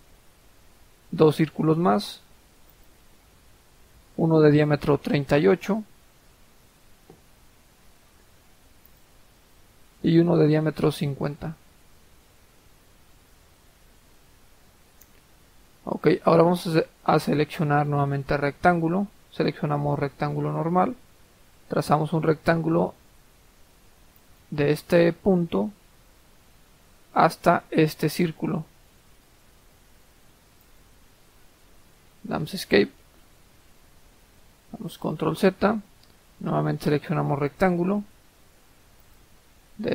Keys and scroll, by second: 5.8-6.2 typing, 6.6 Return, 10.7-11.4 typing, 11.6 Return, 13.0 Escape, 31.6 Escape, 34.7 ctrl+z.